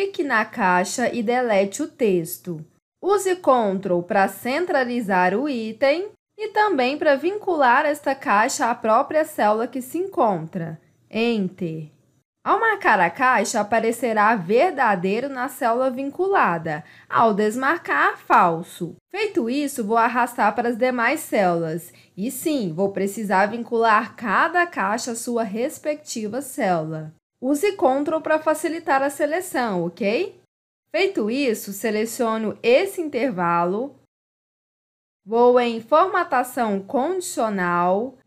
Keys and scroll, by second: 1.4 Delete, 10.2 Return, 27.5 Return.